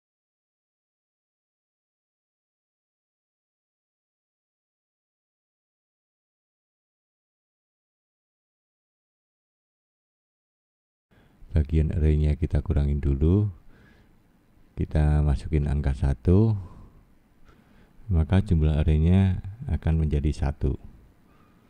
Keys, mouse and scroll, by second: 0.1 click, 0.6 middle click, 1.3 click, 2.5 click, 4.4 middle click, 5.0 click, 5.6 scroll down 1, 6.5-7.3 scroll up 1, 7.3 middle click, 8.5 middle click, 11.6 scroll down 2, 13.2 click, 13.4 click, 13.6 click, 14.0 click, 14.2 click, 14.4 click, 14.6 click, 15.6 click, 19.0 middle click, 20.1-20.6 scroll up 1, 20.6 middle click.